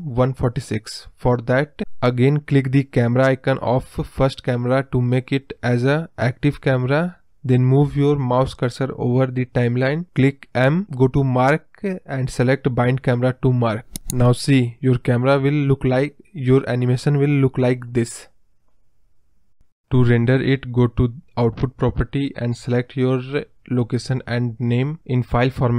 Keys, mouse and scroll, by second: 0.3-3.3 drag, 5.4 click, 8.0 m, 9.1-12.7 drag, 12.7 space, 14.0-15.3 scroll up 1, 21.8 space, 22.9 click, 25.6 click.